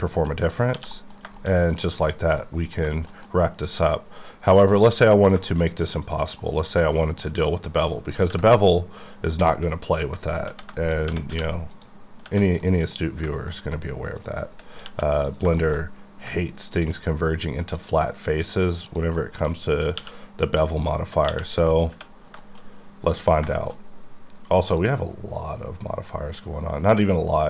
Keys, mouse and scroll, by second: 0.0-0.8 scroll down 4, 0.3 middle click, 0.8 1, 0.9 middle click, 1.2-1.7 scroll down 2, 1.4 shift+middle click, 1.6 middle click, 1.8 middle click, 2.4 middle click, 3.0 shift+middle click, 3.3 shift+double middle click, 4.8 middle click, 5.7 shift+scroll up 2, 8.0 middle click, 8.5-9.0 scroll up 3, 9.6-10.0 scroll down 3, 10.8 shift+middle click, 11.0 shift+scroll up 1, 11.3 q, 11.7 click, 12.7 middle click, 13.2 shift+middle click, 13.5 middle click, 13.6-14.2 scroll up 3, 14.2 click, 14.8 2, 15.3 click, 15.7 shift+middle click, 15.8-16.8 scroll up 3, 17.4 shift+click, 17.8 shift+click, 18.5 shift+click, 18.9 shift+click, 19.2 shift+middle click, 20.0 q, 20.5 click, 21.3 q, 21.5 click, 22.1-22.7 scroll down 3, 22.4 shift+middle click, 23.3 shift+scroll down 1, 23.5 shift+middle click, 24.7 click, 25.2-26.9 scroll down 10, 26.9 click.